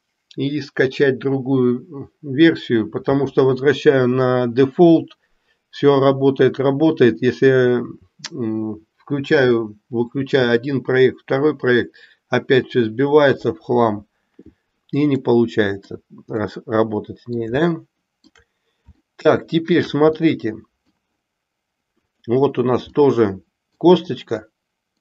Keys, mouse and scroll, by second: 15.2 middle click, 16.5 middle click, 17.8 shift+middle click, 19.0-20.0 shift+middle drag, 20.2 middle click, 21.9 click, 22.9-23.8 middle drag, 24.5 middle click.